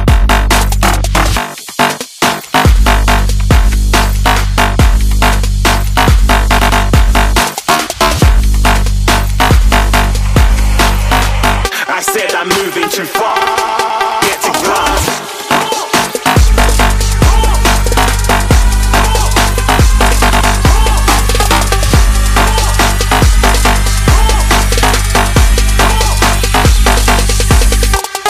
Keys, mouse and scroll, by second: 7.2 right click.